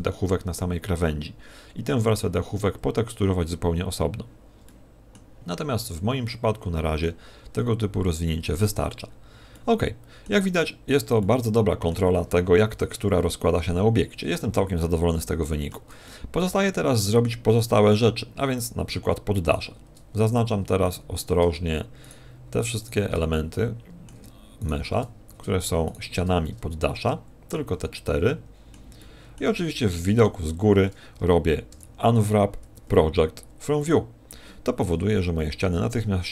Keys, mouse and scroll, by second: 4.6 middle click, 5.6 middle click, 7.4-7.8 scroll up 4, 8.5-9.0 scroll down 3, 9.0-9.5 scroll down 5, 9.5 middle click, 10.6 middle click, 11.2 middle click, 12.9 KP_1, 14.8 shift+middle click, 16.0 middle click, 17.6 middle click, 18.6 right click, 19.4 shift+right click, 20.8 right click, 22.0 shift+right click, 22.8 shift+right click, 23.3 middle click, 24.6 shift+right click, 25.8 shift+right click, 26.4 middle click, 27.6 z, 27.9 middle click, 29.0 middle click, 30.1 KP_7, 31.7 u, 34.9 a, 35.2 a, 35.8 g.